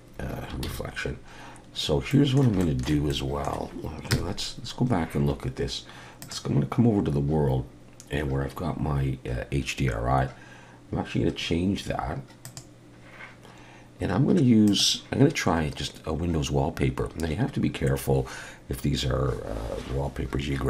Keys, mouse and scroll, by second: 0.7 ctrl+s, 1.8-2.3 scroll up 2, 2.1 middle click, 2.6 shift+middle click, 3.1 middle click, 4.1 KP_0, 6.2 click, 12.4 click.